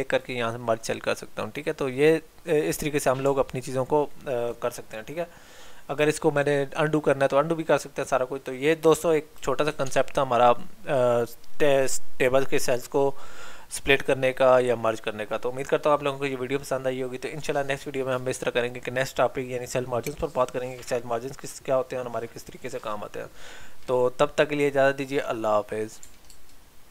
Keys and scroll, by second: 9.9 alt+Tab.